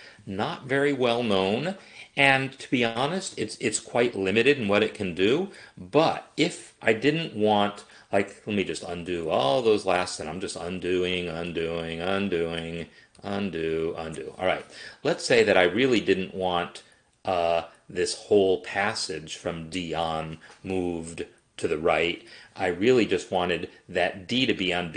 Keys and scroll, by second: 8.9 ctrl+z, 9.1 ctrl+z, 9.3 ctrl+z, 9.6 ctrl+z.